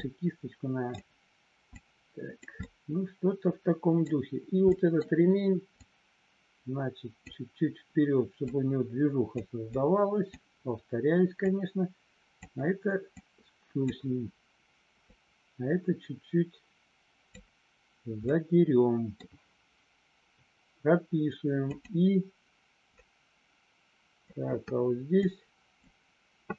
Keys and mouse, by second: 1.8 click, 2.7-4.1 middle drag, 4.6 middle click, 5.7-7.3 drag, 8.5 click, 9.8 click, 11.5 click, 13.2 click, 15.1-17.3 drag, 18.2 middle click, 21.7 click, 23.0-24.2 drag, 25.2 click.